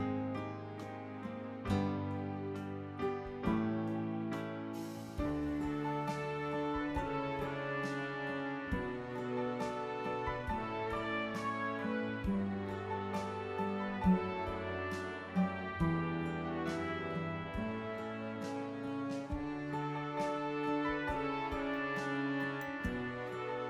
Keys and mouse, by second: 2.9 click, 4.5 click, 10.1 click, 11.8 click, 13.4 click, 14.9 click, 16.5 click, 18.2 click, 20.7 click, 22.5 click.